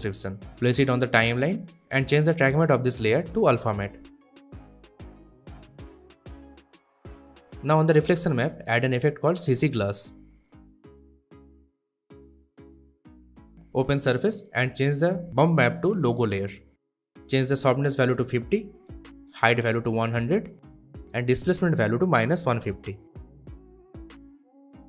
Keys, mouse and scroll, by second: 1.9 click, 7.4 click, 9.6-11.5 typing, 12.3 click, 18.1-19.0 typing, 19.6 click, 20.0-21.1 typing, 21.8 click, 22.3-23.9 typing.